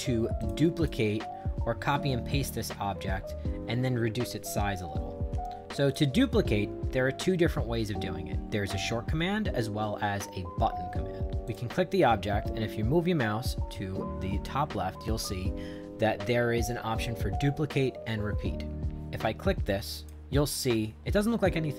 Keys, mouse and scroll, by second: 0.4 click, 0.7 click, 5.8 click, 11.4 click, 19.9 click.